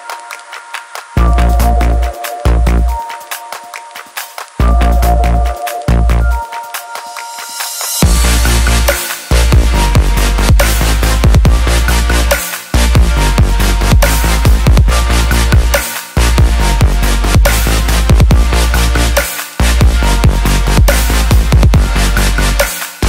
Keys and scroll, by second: 15.9 ctrl+t.